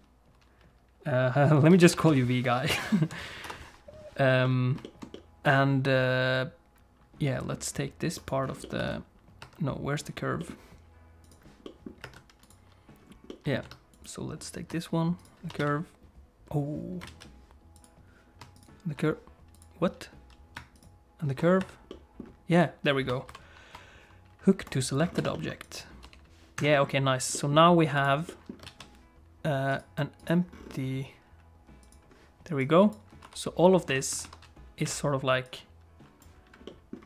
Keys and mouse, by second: 4.4 middle click, 4.8 shift+middle click, 5.1-7.5 middle drag, 8.2 click, 8.6 middle click, 8.8 Tab, 9.4 Tab, 10.4 middle click, 11.2 click, 11.6 middle click, 12.0 Tab, 12.4 click, 13.3 middle click, 13.6 Tab, 15.6 Tab, 17.1 alt+a, 18.5 shift+click, 20.7 ctrl+click, 21.6 Tab, 21.9 middle click, 22.5 click, 23.3 ctrl+h, 25.2 Tab, 25.3 middle click, 25.7 click, 26.0 g, 26.7 middle click, 27.3 middle click, 28.3 middle click, 28.6 alt+a, 29.7 click, 30.2 click, 31.8 click, 32.7 click, 33.2 r, 34.1 r, 35.5 click, 36.6 middle click.